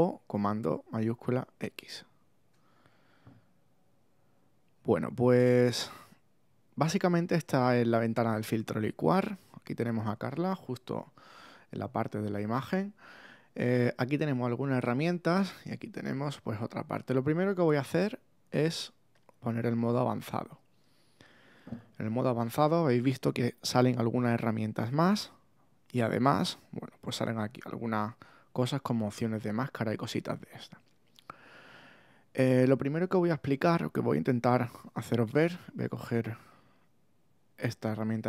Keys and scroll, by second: 1.7 shift+super+x.